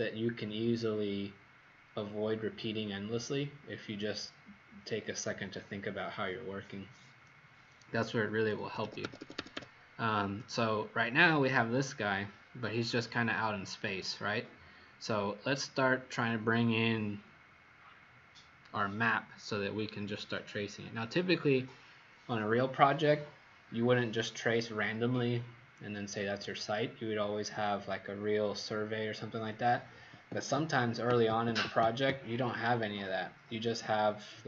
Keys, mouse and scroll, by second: 8.3 Escape, 8.6 Escape, 8.8 Escape, 9.0 Escape, 9.2 Escape, 9.4 Escape, 10.3-10.6 scroll down 2, 13.1 scroll down 1, 14.3 scroll up 2, 15.8 scroll up 1.